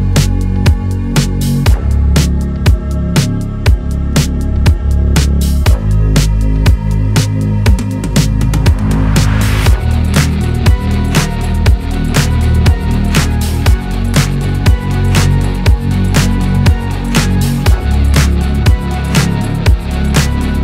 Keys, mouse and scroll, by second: 0.1 click, 5.2 Tab, 5.4 scroll down 1, 5.6 shift+middle click, 5.9 Left, 6.1 scroll up 1, 6.6 s, 7.8 scroll up 2, 7.9 shift+middle click, 8.2 Left, 8.8 Left, 9.6 shift+middle click, 9.8 scroll up 4, 10.0 shift+middle click, 10.3 click, 10.7 s, 12.3 scroll down 1, 13.4 Tab, 14.8 click, 15.1 Tab, 15.9 Delete, 16.1 scroll down 1, 16.3 scroll up 10, 16.7 click, 17.4 KP_7, 17.7-18.1 scroll up 4, 18.1-18.5 scroll down 5, 18.5 shift+middle click, 19.0 shift+d, 19.6 click.